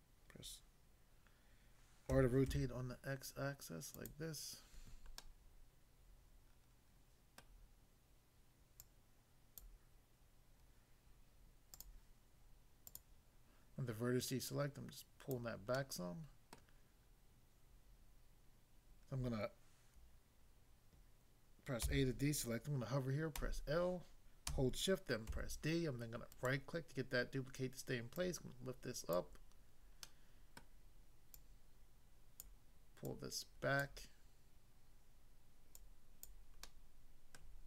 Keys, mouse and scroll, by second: 2.2-2.5 typing, 4.0 click, 5.2 middle click, 7.4 middle click, 8.8 click, 9.6 click, 11.7 click, 12.9 click, 14.5 click, 15.3 click, 15.8 middle click, 16.6 middle click, 21.8 a, 23.4 l, 25.3 shift+d, 26.3 right click, 28.1 click, 29.2 click, 30.0 middle click, 30.6 middle click, 31.4 click, 32.4 click, 33.0 click, 35.0 click, 35.8 click, 36.2 click, 36.6 middle click, 37.3 middle click.